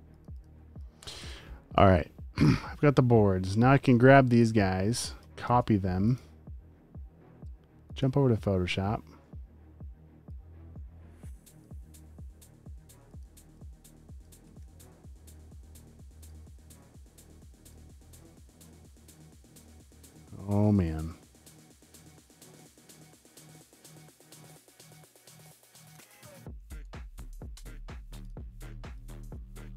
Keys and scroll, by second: 0.3 alt+super+space, 0.9 space, 1.1 space, 1.1 v, 5.5 super+c, 14.4 super+z, 14.6 v, 21.3-22.4 typing, 26.9 super+g.